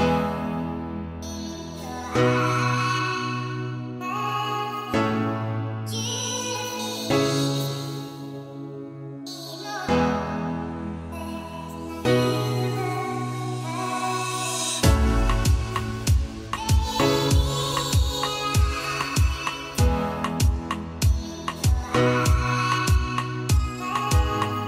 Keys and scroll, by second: 16.2 Return, 18.1 o.